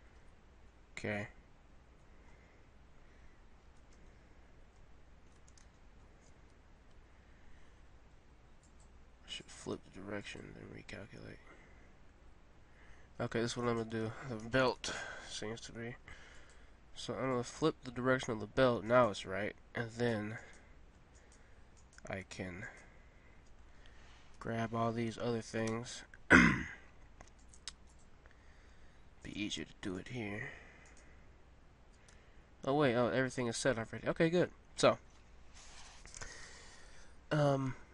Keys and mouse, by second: 0.2 Tab, 2.5 middle click, 7.0 Tab, 10.8-12.0 drag, 13.6-15.4 right drag, 14.6 ctrl+l, 18.9-24.3 middle drag, 24.3 ctrl+l, 25.6 a, 27.4-32.6 middle drag, 29.2 click, 29.2-30.8 right drag, 32.2 Tab, 35.7-37.9 middle drag.